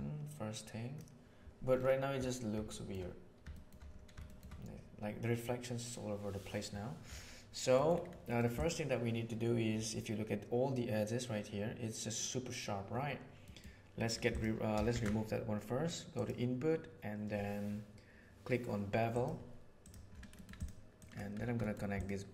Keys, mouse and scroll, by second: 2.7 shift+middle click, 3.4 shift+middle drag, 4.2 shift+middle click, 7.7 middle click, 8.5 click, 13.5 middle drag, 14.2 click, 14.8 shift+a, 20.5 click, 20.9 click, 21.5 middle click, 21.9 click.